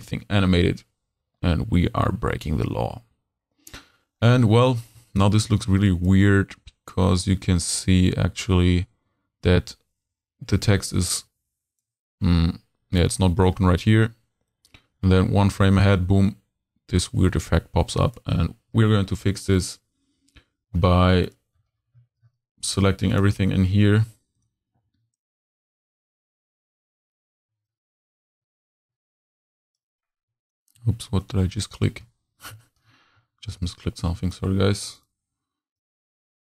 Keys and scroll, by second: 24.8 shift+x, 24.9 shift+q, 26.0 shift+q, 31.1 shift+super+z.